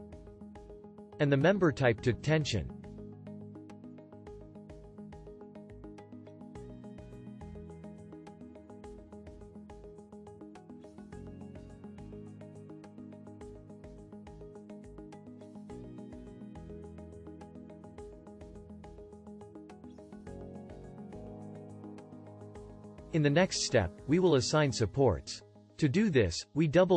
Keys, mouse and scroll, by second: 11.3-14.5 shift+drag.